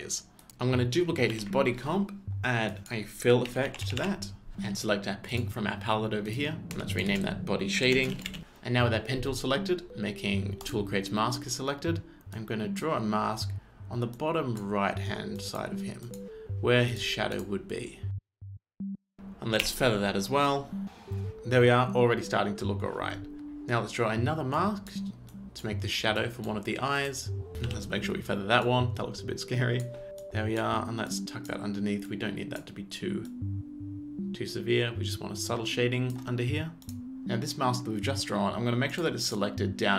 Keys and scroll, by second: 1.0 ctrl+space, 1.3 ctrl+d, 3.2-4.5 typing, 6.8 Return, 7.2-8.9 typing, 18.9 ctrl+z, 19.6 f, 27.5 f, 27.6 f.